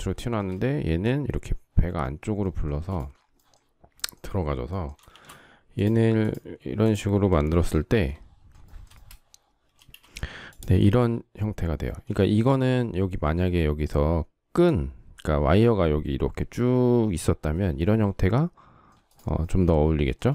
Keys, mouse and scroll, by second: 2.4 space, 4.8 shift+x, 8.3 shift+middle click, 9.4 space, 11.8 shift+middle click.